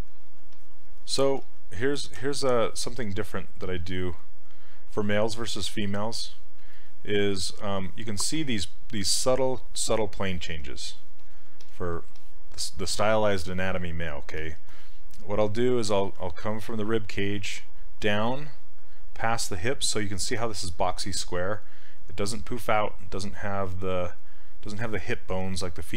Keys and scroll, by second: 1.4 s, 2.2 s, 16.2 s.